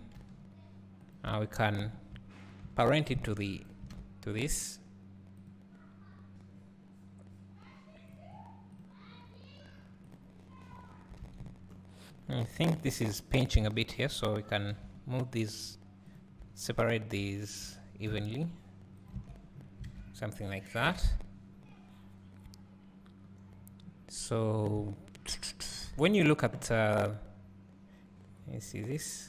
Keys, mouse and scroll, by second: 1.6 shift+click, 3.9 alt+a, 10.8 scroll down 1, 11.3 alt+a, 11.4 scroll up 1, 13.0 Tab, 14.0 alt+click, 14.8 g, 17.0 alt+click, 17.8 g, 19.2 Tab, 19.6-19.9 scroll down 2, 19.9 alt+a, 20.6-24.6 scroll down 2, 24.6 scroll down 1, 24.8 `.